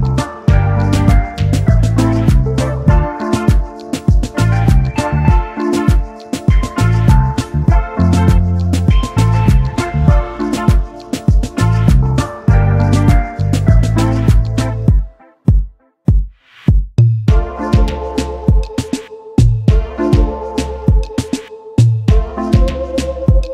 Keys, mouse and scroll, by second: 4.6 double click, 12.7 alt+scroll up 1, 13.5 alt+click, 16.3 ctrl+d, 16.7 ctrl+d, 17.0 ctrl+d, 17.7 ctrl+d, 17.9 ctrl+d, 18.2 ctrl+d, 18.6 ctrl+d, 19.0 ctrl+d, 19.3 ctrl+d, 19.9 ctrl+d, 22.0 right click, 23.1 shift+click.